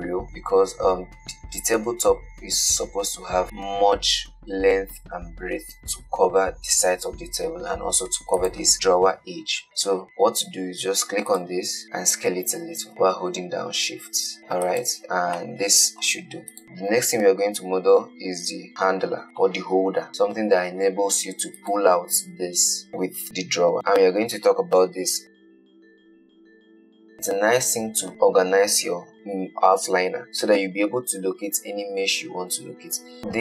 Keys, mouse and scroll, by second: 0.3-0.9 scroll up 2, 0.9-2.5 shift+middle drag, 2.5-3.4 scroll down 2, 8.6 click, 9.6 scroll down 6, 11.6 click, 11.8-12.9 scroll up 2, 12.9 s, 15.6-17.7 middle drag, 19.4-19.9 scroll up 4, 20.1-21.1 shift+middle drag, 21.1 click, 21.6 g, 33.2 click.